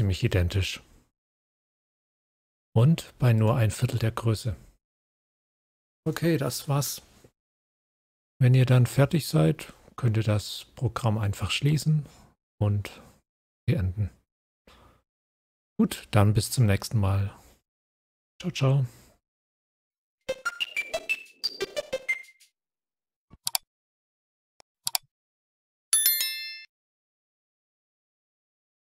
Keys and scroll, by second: 4.4 scroll up 1.